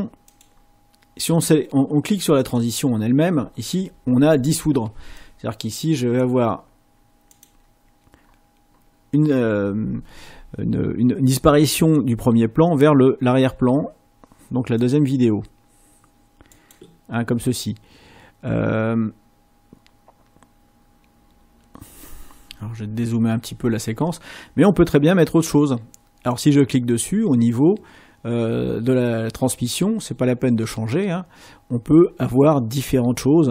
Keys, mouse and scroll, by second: 2.4 click, 5.1 click.